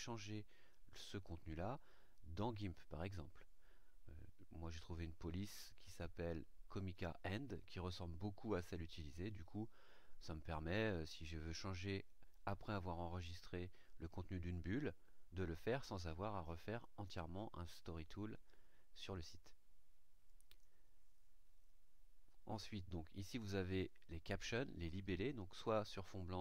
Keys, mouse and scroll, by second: 4.7 click, 20.2 click.